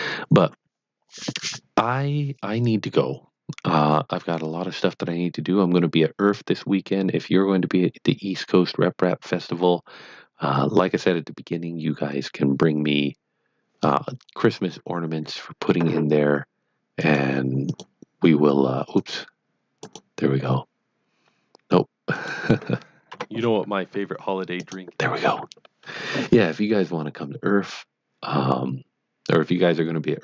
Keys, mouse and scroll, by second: 16.9 scroll down 1, 17.0 click.